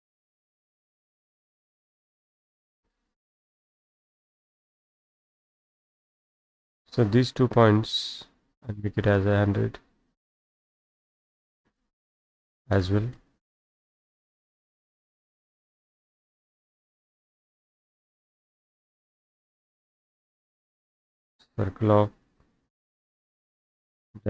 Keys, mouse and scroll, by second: 3.3-4.6 middle drag, 3.3-4.5 scroll, 4.6-5.2 scroll up 3, 6.0 click, 6.7-7.0 scroll down 5, 7.0 middle click, 7.0 scroll, 8.3 click, 8.5 middle click, 8.5-9.6 scroll, 10.4 click, 11.4 click, 12.2-13.3 typing, 13.3 Return, 14.3 middle click, 14.6 scroll, 14.8 Escape, 15.1 Escape, 16.4 click, 16.5 Escape, 16.6 middle click, 16.6-17.5 scroll, 18.7 click, 18.9 Escape, 18.9-19.7 scroll down 5, 19.1 Escape, 19.7-20.3 scroll up 6, 21.3 click, 23.8 click.